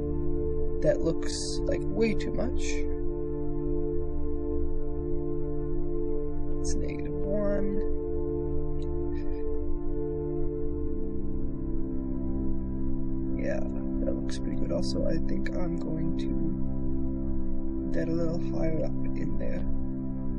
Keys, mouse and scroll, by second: 1.8 shift+space, 2.6-3.8 drag, 4.1 shift+space, 9.3-10.6 drag, 9.3 shift+space, 10.9 KP_0, 12.3 shift+click, 13.5 shift+click, 14.5 click, 15.5 click, 16.3 g, 19.6 ctrl+r, 20.0 shift+space.